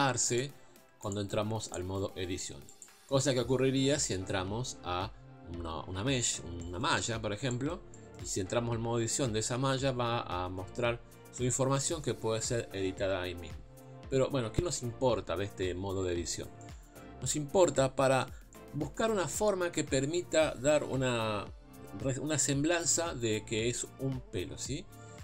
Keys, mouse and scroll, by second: 0.3 click, 1.1 click, 1.7 click, 6.6-25.2 middle drag.